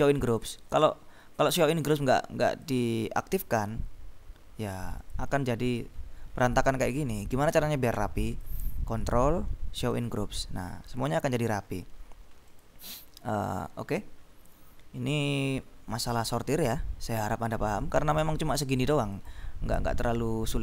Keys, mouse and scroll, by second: 0.3 click, 0.8-2.3 scroll up 3, 2.6 click, 5.1 click, 5.4-5.7 scroll up 2, 5.7-7.3 scroll down 3, 7.6-8.4 scroll up 2, 8.4 click, 8.6 right click, 9.9 click, 10.7-12.6 scroll up 2, 12.6 middle click, 13.4 middle click, 14.0-14.6 scroll down 3, 14.9-16.5 scroll down 4, 16.9-17.5 scroll down 2, 18.5 click, 19.2 click.